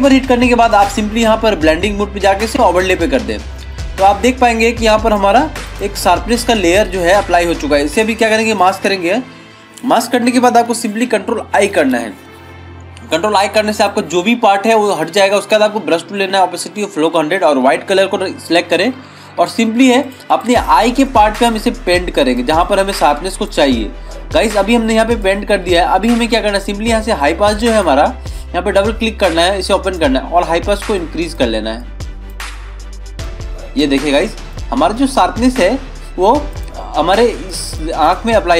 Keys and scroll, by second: 11.8 ctrl+i.